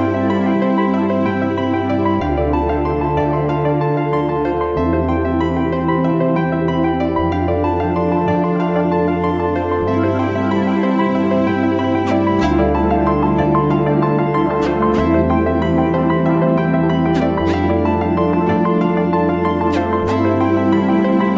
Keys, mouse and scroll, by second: 1.2 space, 1.3 click, 1.4 space, 1.6 space, 3.1 right click, 4.0 click, 5.1 click, 5.3 scroll down 1, 5.7-6.0 scroll up 1, 6.0 click, 11.2 click, 11.7 click, 12.6 right click, 14.1 click, 16.1 click, 18.2 click.